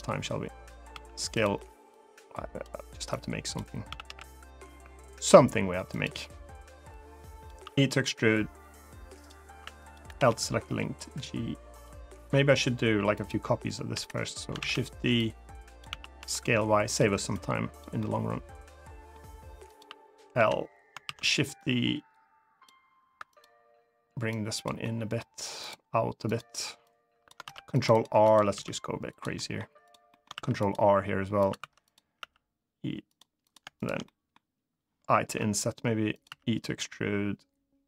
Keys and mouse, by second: 0.7 s, 1.1 click, 1.7 click, 2.9 click, 3.6 s, 3.8 x, 5.6 click, 6.7 click, 7.3 e, 8.9 click, 9.5 click, 9.8 l, 10.4 g, 11.4 click, 13.6 l, 14.3 shift+d, 14.4 right click, 14.9 click, 15.6 s, 15.9 y, 16.6 click, 17.1 click, 17.7-18.9 middle drag, 20.1 l, 20.8 shift+d, 21.0 right click, 21.3-22.4 drag, 23.0 click, 24.0 click, 24.5 middle click, 26.6 click, 27.2 ctrl+r, 27.6 right click, 27.9 3, 28.3 e, 28.8 click, 29.1 middle click, 29.6 click, 29.8 middle click, 30.1 ctrl+r, 31.1 click, 31.3 3, 31.6 click, 31.9 e, 32.8 click, 33.2 click, 33.5 shift+click, 33.8 middle click, 35.9 click, 35.9 i.